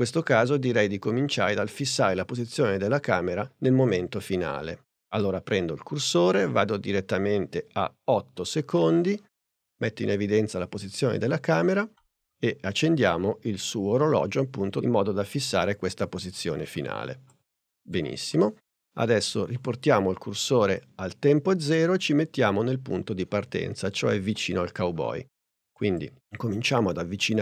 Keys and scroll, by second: 11.9 p.